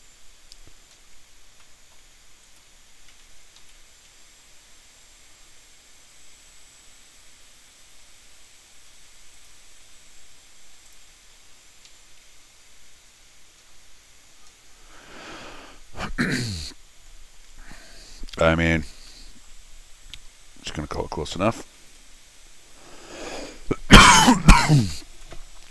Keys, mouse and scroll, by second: 0.9-1.6 scroll up 3, 1.6 middle click, 2.4 click, 3.1 c, 3.6 n, 4.5 middle click, 9.3 click, 10.9 click, 11.3-11.7 scroll up 4, 11.9 Escape, 14.0 scroll down 1, 14.4 scroll up 1, 16.6 scroll up 2, 18.9 scroll down 4, 19.1 middle click, 21.6 alt+x.